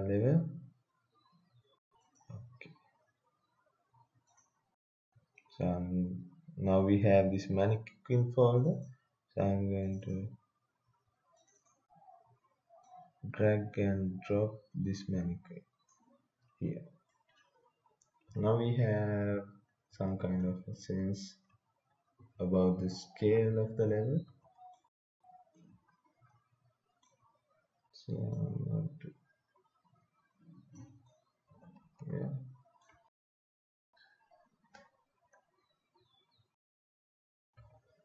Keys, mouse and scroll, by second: 2.0 click, 8.5 click, 9.9 click, 17.1 right click, 18.2-26.1 typing, 25.5 right click, 28.3-31.1 drag, 31.1 right click, 31.2-32.6 typing.